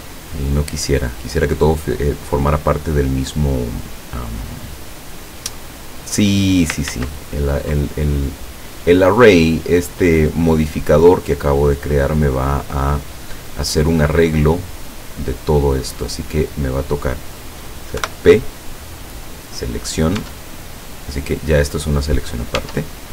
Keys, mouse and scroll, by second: 4.0 click, 5.2 scroll down 1, 7.0 ctrl+z, 11.9 click, 13.6 scroll down 1, 14.2 middle click, 15.2 scroll up 1, 15.9-16.4 scroll up 1, 18.0 p, 19.5 click, 20.2 Tab, 20.7-21.2 scroll down 1, 21.5 right click, 22.2-22.6 scroll up 1, 22.7 Tab.